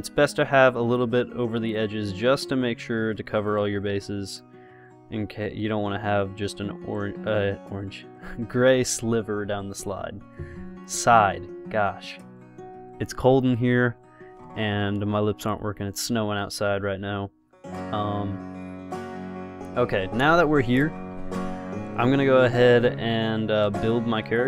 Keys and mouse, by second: 2.0-7.4 drag, 16.8-24.4 middle drag.